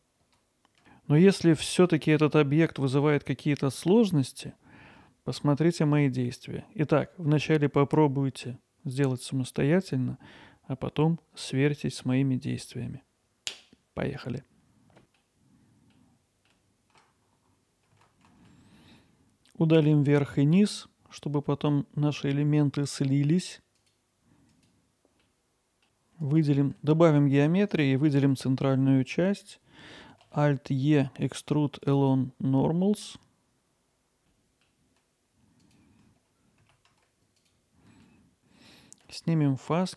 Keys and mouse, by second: 0.1 z, 1.6 middle click, 16.7 alt+middle click, 17.2 shift+click, 17.5 alt+middle click, 18.4 x, 19.9 middle click, 21.9 ctrl+r, 25.2-25.9 drag, 26.2 click, 26.9 3, 27.0 click, 28.1 click, 30.3 alt+e, 34.7 typing, 34.9 click, 35.1 alt+middle click, 35.7 alt+shift+click, 36.6 alt+middle click, 36.9 middle click, 37.4 ctrl+b.